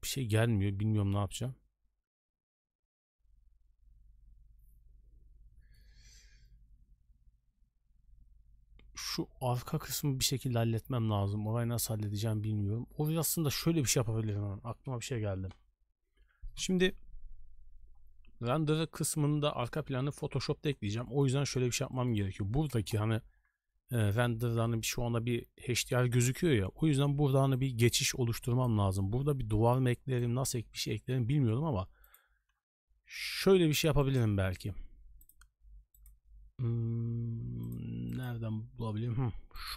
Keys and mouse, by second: 14.6 Escape, 20.4 middle drag, 21.0 shift+middle drag, 21.4 middle drag, 21.9 shift+middle drag, 22.8 KP_0, 24.0 shift+middle drag, 26.8 d, 27.3 d, 27.4-29.6 d, 27.5-28.8 drag, 29.6 right click, 30.2 d, 30.8-31.2 middle drag, 31.3 middle click, 32.0 click, 33.5 b, 34.2 n, 35.2-39.7 drag.